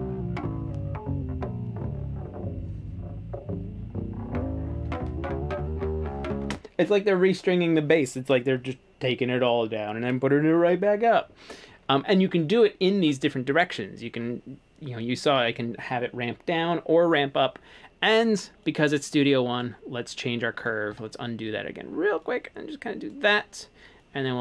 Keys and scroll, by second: 6.5 space, 20.9 super+z.